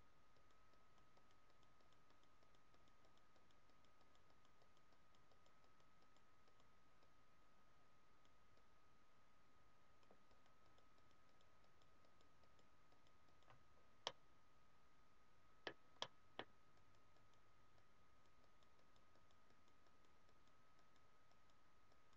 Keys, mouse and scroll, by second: 0.0 click, 0.3-13.6 click, 13.6 scroll down 1, 14.0 middle click, 16.0 middle click, 16.8-22.1 click.